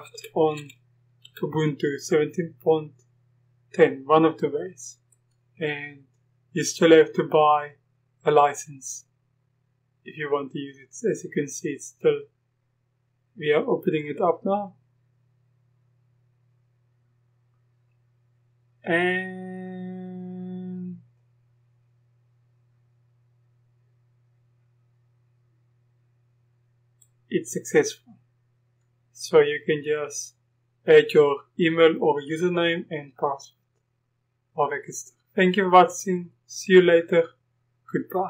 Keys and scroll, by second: 0.0-1.3 typing.